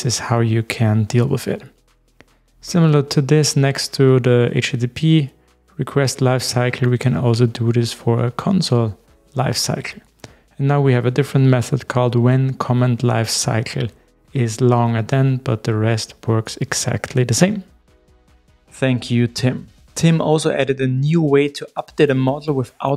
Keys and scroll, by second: 12.0 super+v.